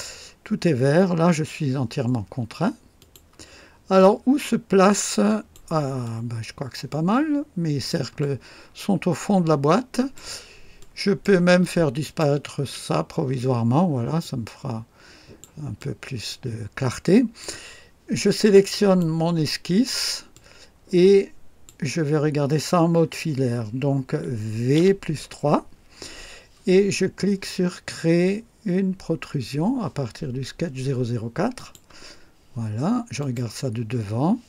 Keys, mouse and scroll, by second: 3.0 click, 4.0-5.7 drag, 6.0-8.1 drag, 8.1-10.3 drag, 10.7 click, 12.0 click, 12.7 space, 13.5-13.9 scroll down 1, 14.2-15.6 drag, 15.7-17.6 drag, 18.7 click, 20.3-21.8 drag, 24.7 v, 25.1 KP_3, 31.5 click, 33.2 click, 33.9 scroll up 1.